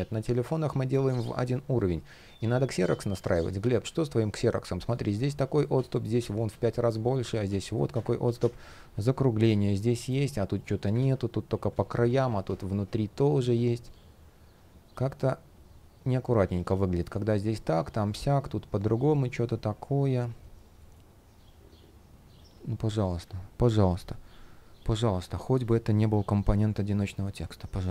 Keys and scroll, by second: 4.8 shift+p, 7.9 super+z, 10.6 super+z, 20.5 shift+o.